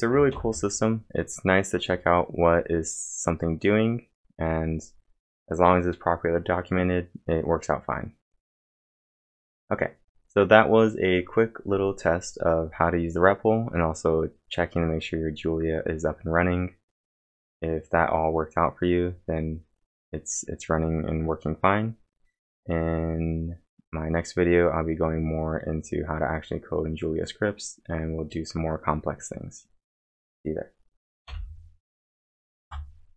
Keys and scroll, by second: 0.0-1.1 typing, 0.3 ctrl+l, 2.8-3.5 typing, 31.1 ctrl+l, 31.3 ctrl+l, 32.6 ctrl+d.